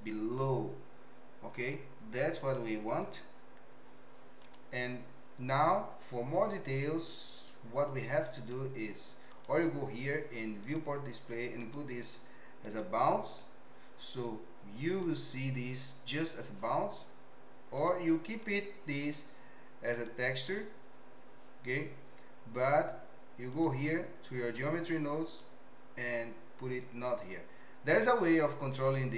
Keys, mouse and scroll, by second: 1.5 z, 4.5 click, 9.3 click, 10.7 click, 11.6-12.9 drag, 15.2 click, 17.9 click, 19.0-20.4 drag, 23.5 click, 25.3 click.